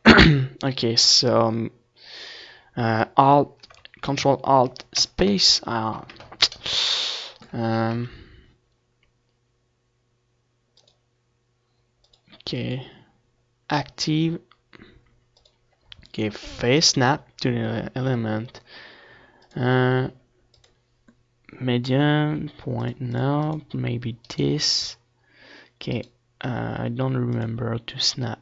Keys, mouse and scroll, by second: 3.7-5.2 ctrl+alt+shift+middle drag, 5.2 ctrl+alt+shift+KP_3, 8.1-11.6 drag, 12.7-14.5 drag, 17.2 middle click, 18.0-19.9 drag, 20.3-22.9 drag, 21.8-26.5 right drag, 24.8-26.7 drag.